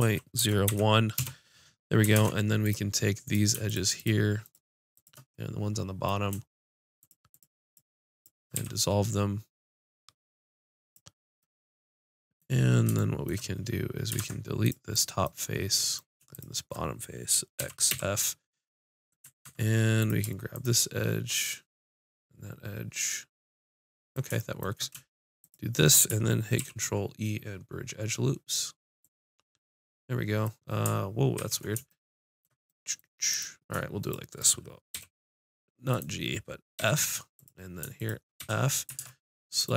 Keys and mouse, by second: 2.2 ctrl+Tab, 3.2-8.6 drag, 7.2-8.6 right drag, 8.6 x, 11.4 click, 14.2 ctrl+Tab, 14.9 click, 17.7 x, 19.4 ctrl+Tab, 20.5 click, 25.4-26.4 drag, 26.6 ctrl+e, 31.4 ctrl+z, 35.0 g, 36.8 f, 37.6 click, 38.4 f, 39.0 ctrl+Tab.